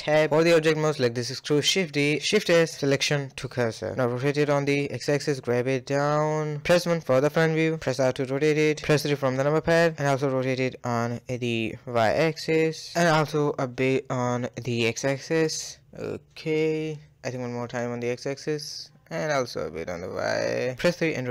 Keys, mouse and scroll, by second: 0.4 click, 1.0 shift+d, 2.2 shift+s, 3.6 scroll up 4, 3.9 shift+middle drag, 4.2 r, 4.9 g, 5.8 KP_1, 6.3-6.6 scroll up 2, 6.6 shift+middle click, 6.9-7.3 shift+scroll up 1, 7.3 shift+middle click, 7.5 r, 8.2 KP_3, 8.9-9.2 scroll up 3, 9.2 shift+middle click, 9.5 scroll up 2, 9.8 shift+middle click, 10.0 r, 12.6-13.3 middle drag, 13.3 scroll down 1, 13.4-14.4 middle drag, 14.4-14.9 scroll down 5, 14.9-17.2 middle drag, 17.2 scroll up 1, 17.4 r, 17.7-18.5 middle drag, 18.5 scroll up 1, 18.8 r, 19.3 KP_3, 19.6-20.3 scroll up 5, 20.3 r, 20.9-21.3 middle drag.